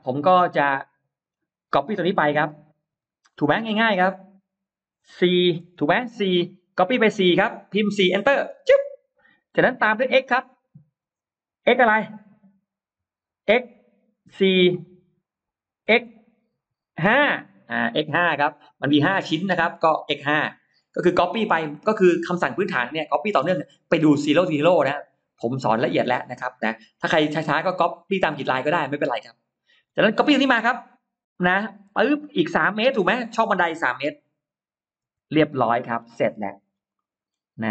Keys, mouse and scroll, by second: 0.6 middle click, 2.1 middle click, 2.7 m, 3.1 click, 5.5 4, 8.8 Return, 9.5-10.6 middle drag, 11.7 x, 14.2 4, 14.4 Return, 15.8 x, 16.5 5, 17.1 Return, 23.7 middle click, 23.7 space, 24.3-24.6 scroll up 2, 24.9 click, 25.4-26.1 scroll down 4, 25.8 middle click, 27.7 middle click, 28.1 scroll down 2, 28.5 middle click, 29.1-29.5 scroll up 2, 29.7 m, 31.5 click, 34.2 3, 34.9 Return, 35.7-36.1 scroll down 1, 35.7 space, 36.1 middle click, 36.5 scroll down 1, 36.8 middle click, 37.4-37.7 scroll up 2.